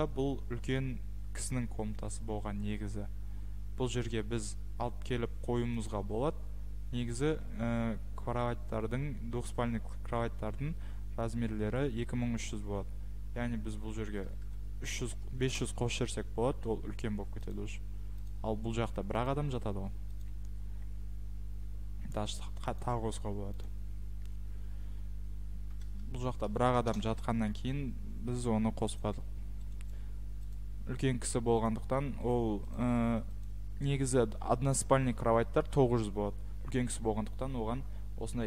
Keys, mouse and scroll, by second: 4.3 Escape, 5.9 click, 7.2 click, 13.7 click, 13.7-14.2 typing, 15.5 Return, 16.0 Escape, 17.1-17.8 typing, 18.3 click, 19.3 click, 19.4 Escape, 20.2 click, 21.5 Escape, 22.8 click, 23.6 click, 25.3-26.3 typing, 26.9 Return, 28.3 Escape, 29.9 click, 29.9 right click, 30.5 click, 30.9 Escape, 31.6 click, 32.3 right click, 32.7 click, 33.4 click, 33.9 Escape.